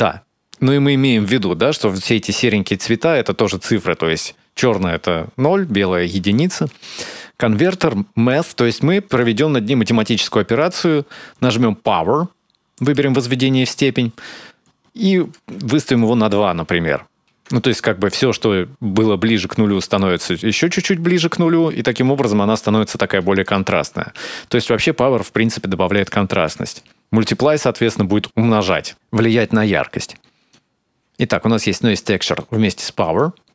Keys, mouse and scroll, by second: 1.1-2.0 scroll down 2, 2.0-2.6 scroll down 2, 6.4 shift+a, 10.4 click, 13.6-14.8 scroll down 1, 14.8 click, 14.8-15.6 scroll down 2, 17.4 shift+click, 25.8 click, 30.3 click, 31.7 middle click, 32.1 click, 32.5 click, 33.1 middle click.